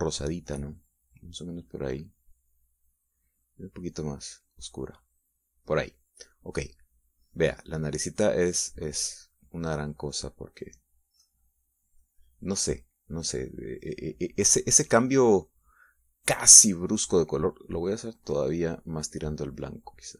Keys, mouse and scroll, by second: 5.0-6.8 drag, 8.1 middle click, 9.2-11.6 drag, 11.7 middle click, 12.6-16.7 drag, 16.8 middle click, 19.8 click.